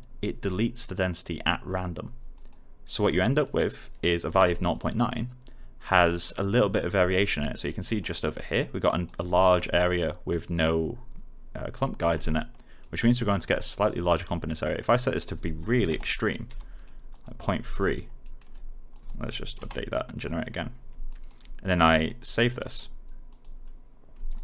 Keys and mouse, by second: 2.3 click, 4.6 alt+click, 7.1 alt+middle click, 7.4 alt+right click, 7.9 alt+click, 12.3 middle click, 15.1 click, 16.4 3, 17.1 click, 17.7 alt+right click, 18.2 alt+middle click, 18.9 click, 19.5 Return, 20.2-24.4 drag.